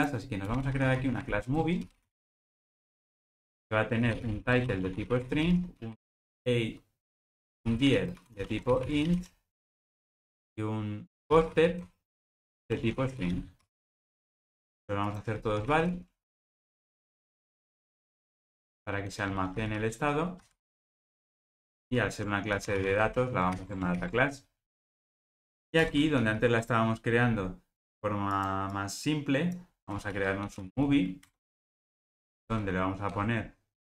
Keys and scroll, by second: 1.6 Return, 23.6 alt+super+l, 26.2 alt+super+l, 31.3 Return.